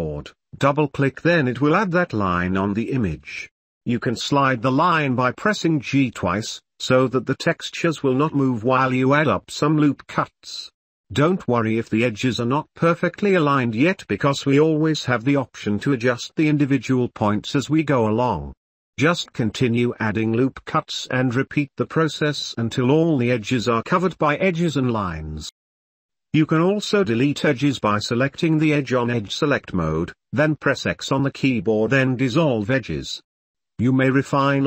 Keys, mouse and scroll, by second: 1.1 ctrl+r, 3.4 ctrl+r, 5.4 ctrl+r, 6.8 ctrl+r, 8.3 shift+middle click, 8.7 middle click, 9.1 click, 9.3 ctrl+middle click, 9.4 ctrl+r, 11.6 shift+middle click, 12.2 shift+click, 12.7 ctrl+r, 13.6 shift+middle click, 13.7 shift+click, 13.8 shift+middle click, 14.0 middle click, 14.3 ctrl+r, 15.4 ctrl+r, 17.2 shift+middle click, 18.1 shift+middle click, 18.7 ctrl+r, 19.8 middle click, 20.0 ctrl+s, 20.8 shift+middle click, 23.8 ctrl+r, 25.1 shift+middle click, 25.6 shift+middle click, 25.9 middle click, 27.0 shift+middle click, 27.5 shift+middle click, 27.9-29.2 shift+middle drag, 30.1 3, 30.9 shift+middle click, 31.7 ctrl+r.